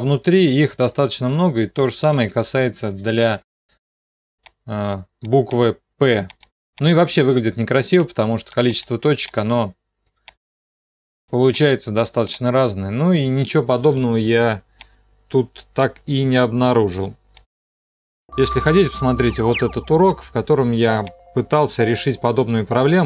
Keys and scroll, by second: 2.4 c, 4.4 c.